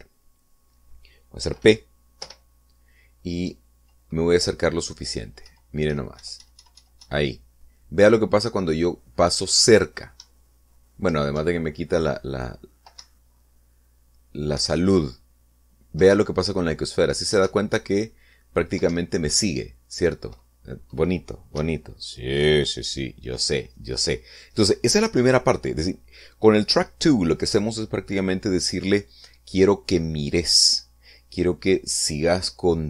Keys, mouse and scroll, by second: 3.2 p, 4.5 Down, 6.5 Right, 11.2 Up, 12.3 Down, 14.0 Up, 15.7 Down, 17.1 Up, 18.5 Down, 19.9 Up, 22.6 Escape.